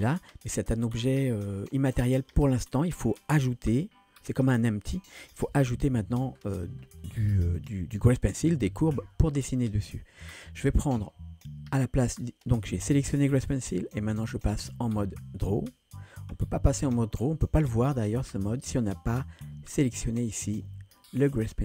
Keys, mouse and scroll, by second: 5.5 KP_1, 6.4-6.9 scroll up 4, 7.6 click, 12.9 click, 14.4-18.7 drag, 19.9 click.